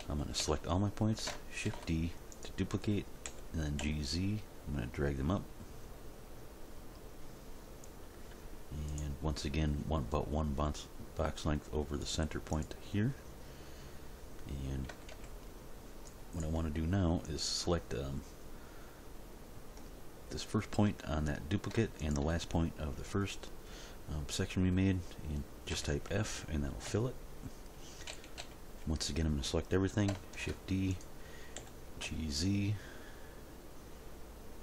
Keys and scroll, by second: 0.0 a, 1.6 shift+d, 3.2 g, 3.8 z, 14.9 a, 25.7 f, 28.0 End, 28.1 a, 30.3 shift+d, 31.6 g, 32.0 z.